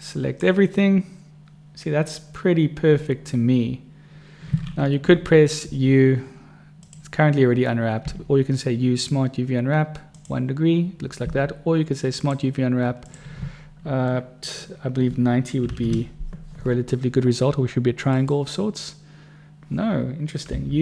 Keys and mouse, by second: 0.2 click, 6.0 u, 8.4 u, 14.3 u.